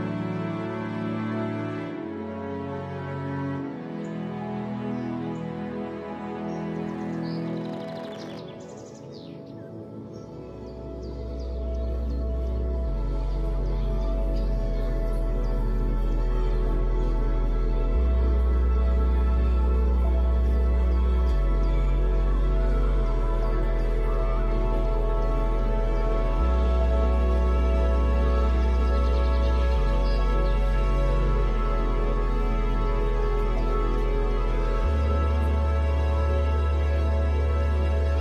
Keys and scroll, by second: 0.3 space, 8.9 space, 10.0 space, 13.5 space, 24.6 space, 25.5 space, 27.8 ctrl+d, 29.9 space, 30.7 space.